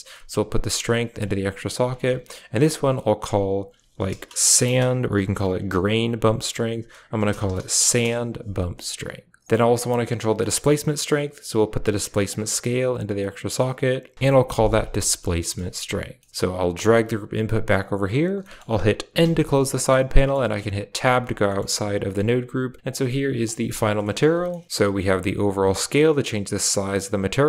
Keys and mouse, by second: 0.2-1.3 drag, 2.4 click, 2.6-7.9 drag, 10.3 middle click, 12.3-13.1 drag, 14.1 Right, 14.9 middle click, 16.0 middle click, 16.4 click, 16.7 g, 18.3 middle click, 19.1 n, 19.6 click, 20.0 click, 20.4 Tab, 21.4-21.7 middle drag, 21.7 a, 21.9 click, 22.8 click, 24.0 shift+middle click, 24.4 middle click, 24.6 shift+n, 24.8-27.0 shift+drag, 27.3 click.